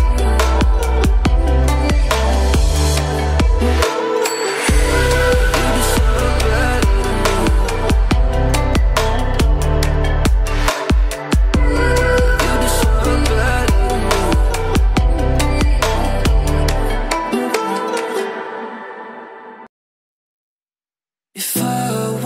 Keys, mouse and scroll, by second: 2.3 [, 2.5 [, 2.6 [, 2.7 [, 2.8 click, 4.3-5.7 typing, 4.6 click, 5.7 click, 8.3 alt+scroll down 1, 8.7 alt+scroll up 1, 9.6 click, 10.1 alt+scroll down 1, 10.3 alt+scroll up 1, 11.3 alt+scroll down 1, 12.3-12.7 alt+scroll up 1, 14.6 alt+scroll down 1, 15.0 space, 15.0 click, 17.0 ctrl+alt+shift+e, 18.7 click.